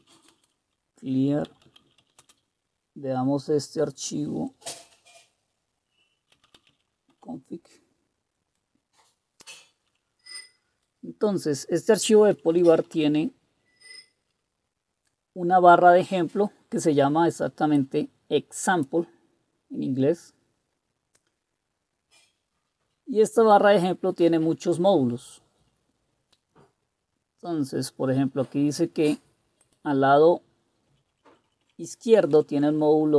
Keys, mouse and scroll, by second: 0.0-2.5 typing, 4.3-4.6 typing, 6.1-7.0 typing, 7.1 Return, 9.8 Down, 10.5 Down, 10.5 Down, 10.6 Down, 10.7-11.5 Down, 12.1 Down, 12.3 Down, 12.5 Down, 13.0-14.2 Down, 20.7-21.3 scroll down 1, 21.3-22.7 scroll down 1, 22.7-23.4 scroll down 1, 23.4-24.0 scroll down 1, 24.0-25.0 scroll down 1, 25.0-25.5 scroll down 1, 25.5-26.1 scroll down 1, 26.1-27.8 scroll down 1, 27.8-29.6 scroll down 1, 29.6-30.9 scroll down 1, 30.9 Up, 30.9 click, 31.1 Up, 31.3 Up, 31.5 Up, 31.6 Up, 32.3 Right, 32.5 Right, 32.7 Right.